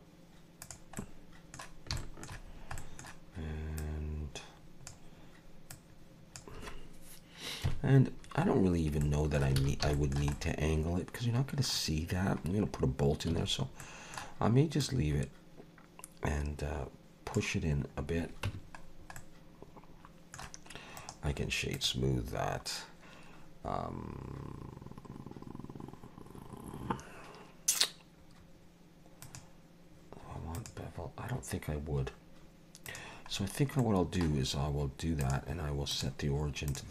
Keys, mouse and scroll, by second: 1.0 middle click, 2.0 shift+middle click, 2.4-2.8 scroll down 2, 2.8 middle click, 3.8 click, 5.7 click, 7.6 KP_Decimal, 8.4 scroll down 3, 9.0 middle click, 9.6 alt+a, 9.9 shift+middle click, 10.3 middle click, 12.4-12.9 scroll down 3, 13.3 a, 13.8 middle click, 14.8 click, 18.0-18.4 scroll down 2, 18.4 Tab, 18.8-19.2 scroll down 2, 19.2 middle click, 21.0 right click, 29.2 click, 32.9 click, 33.3 scroll down 3, 33.8 middle click, 35.2 click.